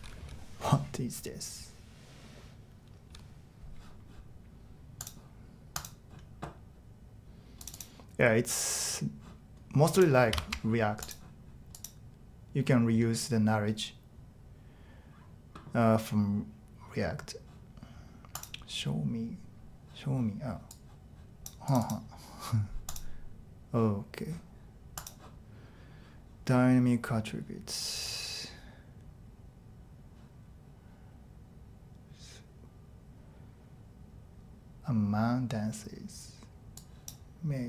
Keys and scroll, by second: 10.4 shift+Tab.